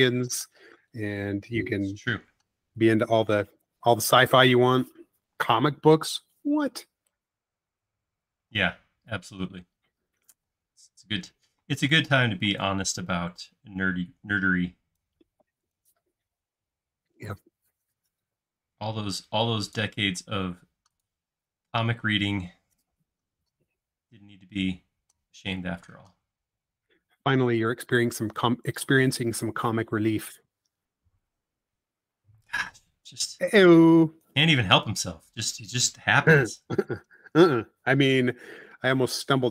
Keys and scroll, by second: 3.4 space, 5.3 m, 8.6 space, 10.4 p, 11.6 space, 12.4 p, 14.4-15.2 typing, 16.9-17.6 typing, 20.2 space, 28.4 BackSpace, 36.7 c, 38.8 Left.